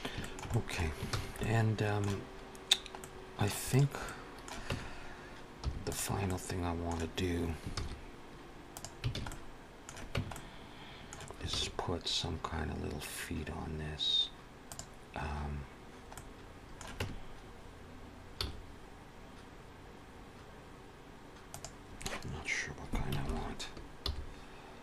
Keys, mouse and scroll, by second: 0.0 shift+middle click, 0.3 middle click, 1.0 ctrl+s, 1.2 middle click, 3.0 middle click, 3.5 click, 3.9 middle click, 4.6 Tab, 5.5 3, 5.7 click, 6.1 middle click, 7.6 shift+s, 9.0 alt+a, 9.1 middle click, 10.0 Tab, 10.2 middle click, 11.3 shift+a, 16.0 middle click, 16.8 Tab, 18.9 s, 23.1 ctrl+KP_7, 23.9 g.